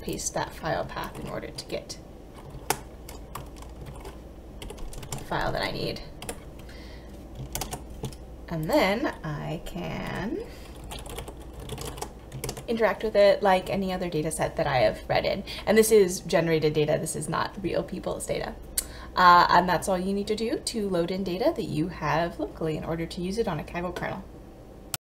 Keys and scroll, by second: 1.1 ctrl+BackSpace, 2.6 shift+0, 3.4 BackSpace, 3.9 shift+9, 4.7 Delete, 5.1 shift+', 5.3 ctrl+v, 6.3 Delete, 7.6 ctrl+Return, 10.9-11.9 typing, 12.5 ctrl+Return.